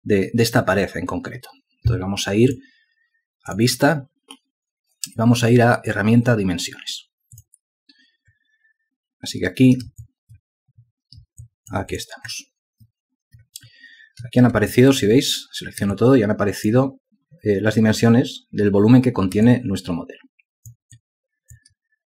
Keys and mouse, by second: 11.8 alt+click, 15.0 ctrl+alt+click, 16.3 alt+click, 19.8 alt+click.